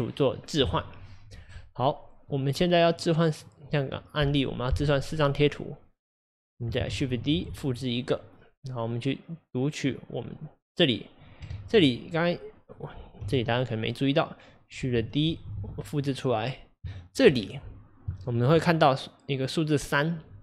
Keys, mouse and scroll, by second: 5.2 click, 6.9 shift+d, 9.9-11.5 drag, 11.5 ctrl+z, 12.8 click, 13.2 x, 14.6 click, 15.3 shift+d, 17.4-18.1 scroll up 4.